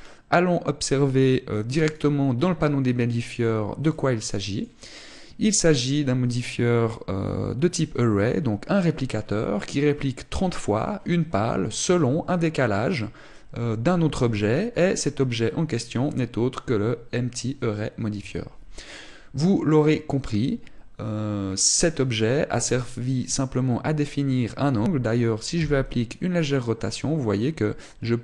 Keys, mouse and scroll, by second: 25.9 r.